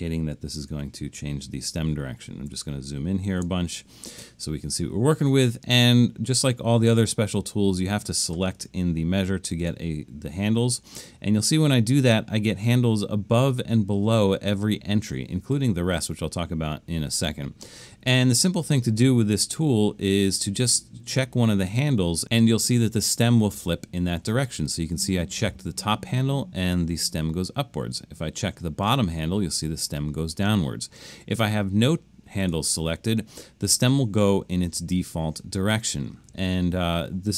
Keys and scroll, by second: 0.7 super+=, 1.2 super+=, 1.8 super+=, 2.5 super+=, 3.3 super+=.